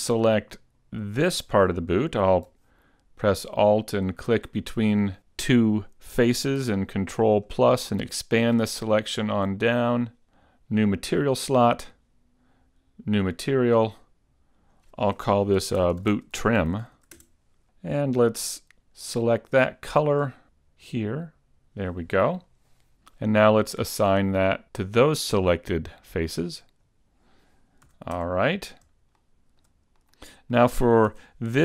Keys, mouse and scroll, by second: 0.1 middle click, 0.9-1.3 scroll up 1, 1.5 middle click, 4.1 alt+right click, 7.6 ctrl+KP_Add, 7.8 ctrl+KP_Add, 8.1 ctrl+KP_Add, 8.7 ctrl+KP_Add, 9.1 ctrl+KP_Add, 10.3 scroll up 3, 11.5 click, 13.2 click, 14.7 click, 16.0 o, 17.3 scroll down 5, 18.4 click, 20.1 click, 26.6 click, 27.9 a, 28.5 Tab, 28.6 scroll down 3, 29.3 shift+middle click, 30.1 click, 30.3 middle click, 31.4 Tab.